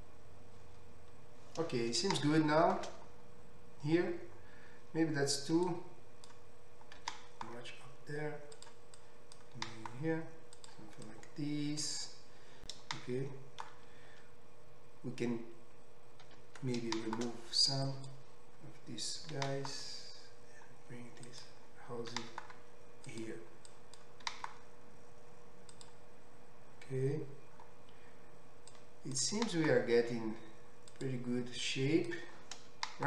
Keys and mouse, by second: 5.8-8.7 drag, 7.0 g, 8.7 middle click, 9.0-10.7 drag, 9.7 g, 10.7 middle click, 11.1-21.4 drag, 13.0 shift+middle click, 16.3 ctrl+x, 19.4 g, 21.4-23.7 middle drag, 22.1 g, 23.7-25.8 drag, 24.2 g, 25.8-28.7 middle drag, 28.7-31.0 drag, 29.4 g, 31.0 middle click, 31.6-33.0 drag.